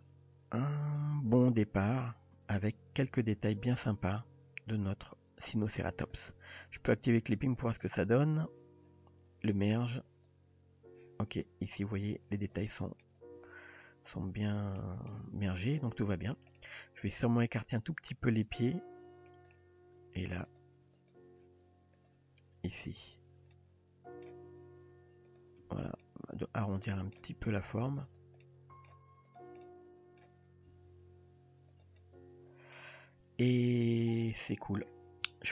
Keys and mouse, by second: 7.6 click, 12.7-13.0 shift+middle drag, 14.8-15.1 shift+middle drag, 16.6-19.3 middle drag, 19.9 Tab, 20.5 click, 20.8 Tab, 21.0 click, 22.0 click, 22.7 Tab, 23.6-24.3 middle drag, 24.4 g, 25.7 Tab, 26.0-27.2 middle drag, 27.3 Tab, 28.1 drag, 28.4-28.9 middle drag, 29.3 click, 29.6-30.2 middle drag, 30.7 s, 32.0-32.8 middle drag, 33.5 Tab, 34.2-34.9 middle drag.